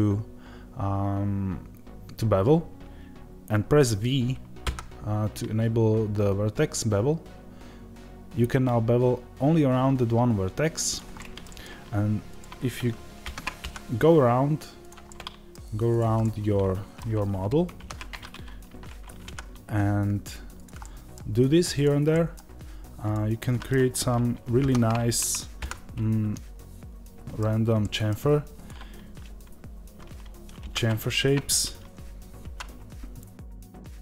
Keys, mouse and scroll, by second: 10.8 click, 11.0-12.1 middle drag, 12.1 click, 13.1 ctrl+b, 14.7 click, 14.9 middle click, 15.8 click, 16.1-20.5 middle drag, 17.7 ctrl+b, 20.5 click, 20.7 middle click, 21.6 click, 22.0 middle click, 22.9 click, 23.3-28.4 middle drag, 24.5 ctrl+b, 28.4-30.5 drag, 30.5 ctrl+b.